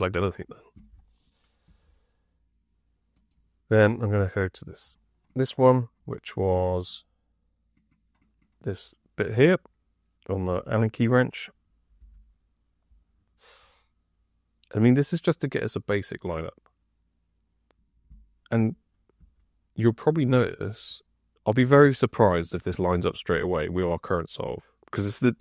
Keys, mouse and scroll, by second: 1.6 F2, 10.4 F5, 11.9 F6, 19.1 F2.